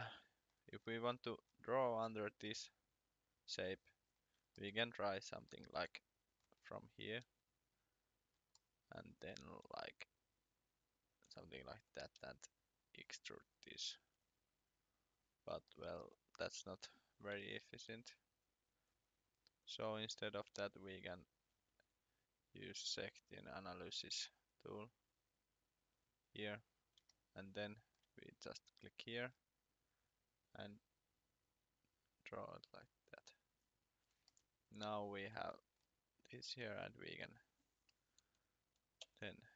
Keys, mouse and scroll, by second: 0.0 shift+middle click, 0.7-1.8 scroll down 2, 3.5-4.0 scroll up 1, 4.4 shift+scroll up 1, 4.5 shift+middle click, 6.0 shift+middle click, 6.5 scroll down 1, 6.9 click, 7.2 r, 8.5 shift+middle click, 9.4 scroll down 2, 10.2 click, 11.7 Escape, 12.1 e, 12.6 click, 15.3 scroll up 1, 15.7 shift+middle click, 16.5 scroll down 2, 16.8-17.3 scroll up 1, 18.7 ctrl+z, 24.3 click, 26.8 scroll up 1, 29.2-30.0 scroll down 1, 30.0 click, 35.7-36.0 scroll down 1, 36.2 click, 36.6 r, 37.7-39.0 scroll, 39.0 p.